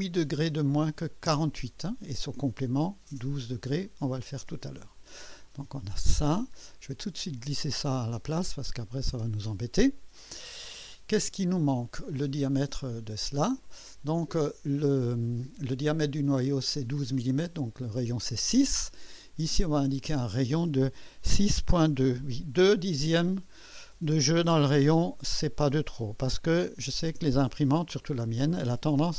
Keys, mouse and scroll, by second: 1.2 Return, 7.7-9.7 drag, 12.8 click, 19.4 click, 21.3 KP_6, 22.1 KP_2, 24.5 typing, 27.1 Return.